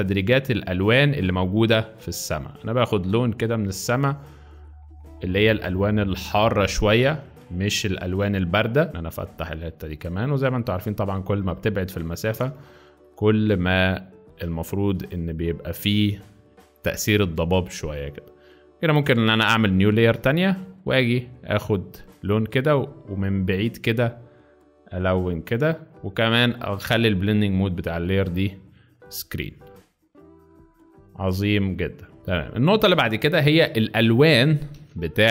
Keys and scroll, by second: 6.3 space, 7.0 alt+space, 8.9 alt+z, 11.6 z, 12.5 space, 13.3 alt+space, 15.1 z, 16.8 ], 17.0 ], 19.2 z, 20.3 alt+z, 32.2 z, 32.9 space, 34.8 v.